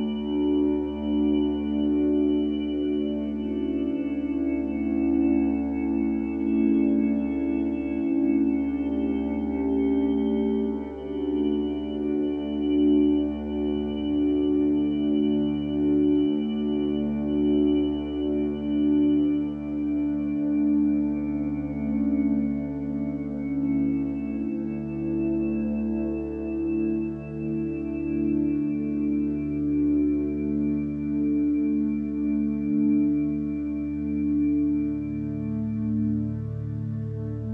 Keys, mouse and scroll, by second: 9.6 ctrl+t.